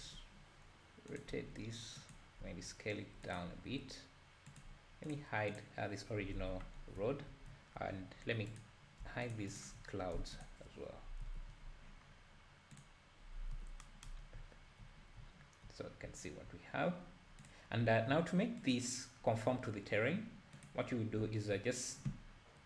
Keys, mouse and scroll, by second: 0.0 r, 1.3 g, 2.4 s, 3.5 g, 5.2 click, 5.6 click, 6.4 h, 6.8 scroll up 1, 7.0 `, 7.5 `, 7.9-8.6 scroll down 4, 8.6 click, 9.5 shift+click, 10.5 shift+click, 11.0 scroll up 2, 11.2 h, 11.6-12.1 scroll up 3, 12.1-12.8 scroll down 1, 12.8 scroll down 1, 12.8 click, 13.5 h, 14.2 scroll up 2, 14.4 `, 15.2 scroll up 2, 16.0 scroll down 2, 17.5-17.8 drag, 18.8 click, 20.7 click, 21.2 `.